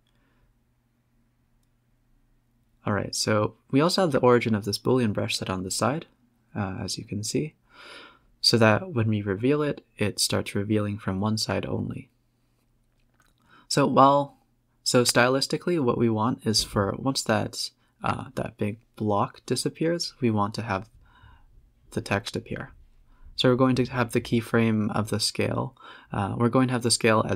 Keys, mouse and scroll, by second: 1.7-4.0 drag, 8.2-9.7 drag, 9.8 click, 11.2-12.6 drag, 12.6 s, 15.5 scroll down 4, 16.3-18.5 drag, 19.0 click, 19.3-20.7 drag, 20.7 space, 21.0-22.0 scroll up 3, 24.3-26.5 drag, 26.7 click, 27.3 KP_4.